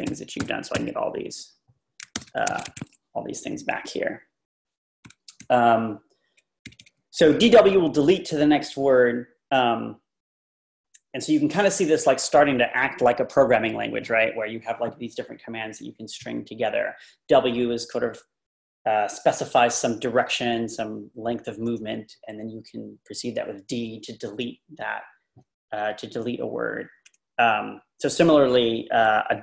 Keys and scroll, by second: 0.0-0.7 typing, 2.2 ctrl+r, 2.5 typing, 2.7 ctrl+r, 3.5 Page_Down, 3.6 Page_Down, 5.4 Down, 5.4 Left, 5.8 typing, 5.9-6.3 Left.